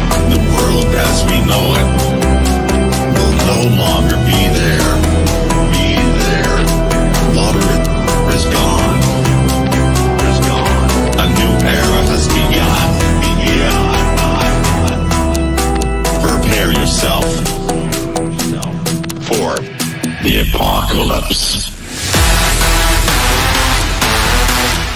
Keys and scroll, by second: 13.8 KP_Add.